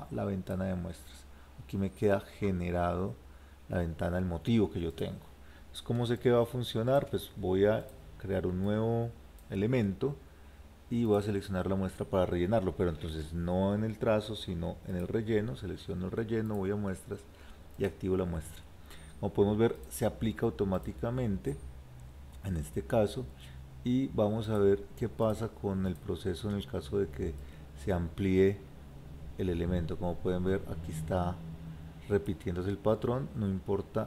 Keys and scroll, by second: 13.1 ctrl+z.